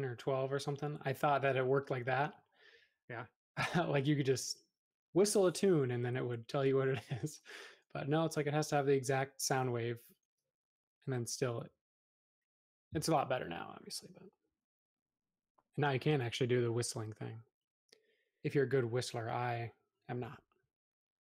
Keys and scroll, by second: 12.9 e, 14.3 Escape, 15.1 space, 16.0 e, 18.3 space.